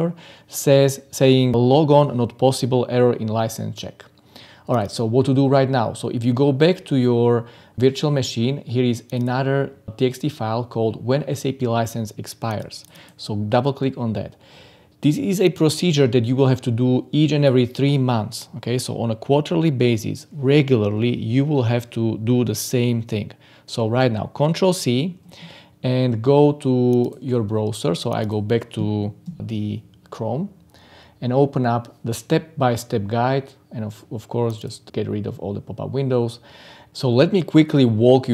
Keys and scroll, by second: 23.6 ctrl+c, 29.2 ctrl+v.